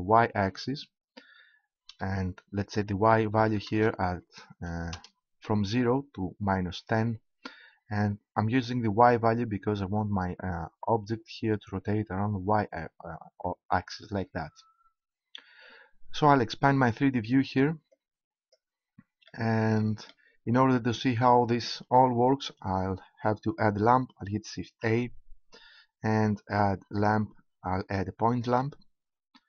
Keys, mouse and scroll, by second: 2.7-6.9 right drag, 17.9-19.6 drag, 24.7 shift+a.